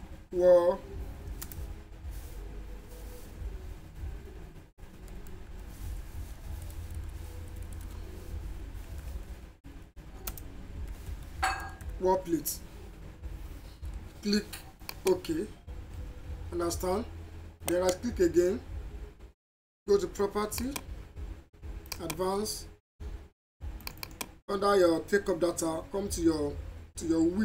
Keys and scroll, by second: 1.5 space, 4.8-6.6 typing, 9.0-11.9 typing, 21.1 a.